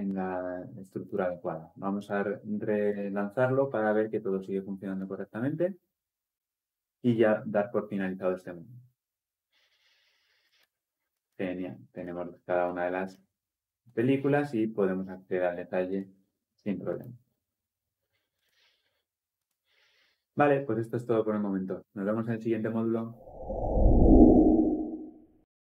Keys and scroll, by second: 1.8 shift+F10.